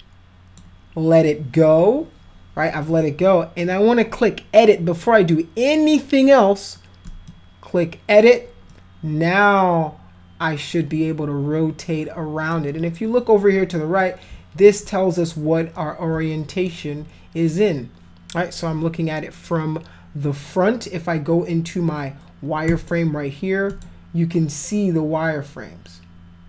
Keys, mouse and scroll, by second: 7.1 click, 8.7-12.5 drag, 14.0 shift+click, 15.7 click, 22.7 click, 23.7 click.